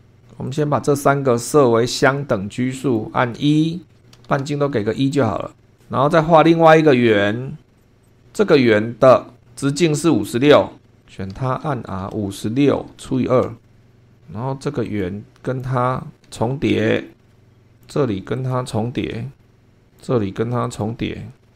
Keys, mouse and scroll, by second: 0.0 super+2, 0.4 click, 1.9 click, 2.8 click, 3.3-4.9 typing, 4.0 click, 5.0 click, 6.5 click, 7.8 click, 8.0 click, 10.8 super+Escape, 11.0 click, 11.3-13.7 typing, 13.9-14.9 scroll up 4, 14.9 click, 15.4 click, 16.2 o, 16.6-17.2 scroll down 4, 17.2 shift+middle click, 17.3 shift+scroll up 2, 17.8 click, 18.4 click, 19.2 o, 19.4 scroll down 1, 19.9 click, 20.6 click, 21.4 o.